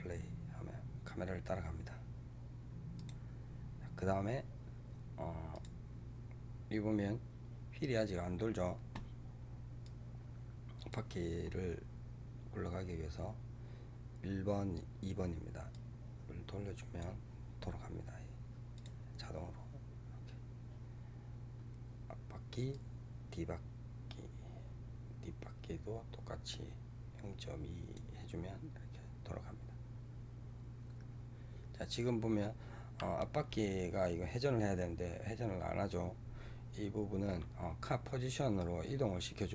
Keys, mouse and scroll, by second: 2.9 click, 5.4 click, 9.7-12.7 drag, 15.6-19.1 drag, 22.6-25.7 drag, 38.5-39.5 drag.